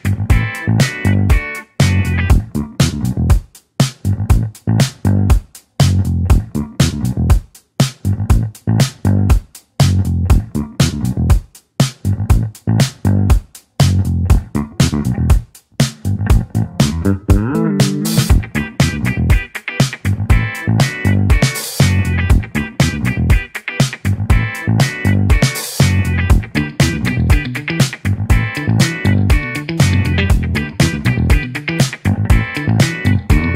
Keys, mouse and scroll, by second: 0.1-0.7 scroll down 2, 0.7-5.1 middle drag, 5.1 click, 5.6-6.2 scroll down 2, 10.5-11.1 scroll down 2, 11.1-16.2 middle drag, 16.2 click, 26.1 click, 27.6-31.5 drag, 31.5 ctrl+z.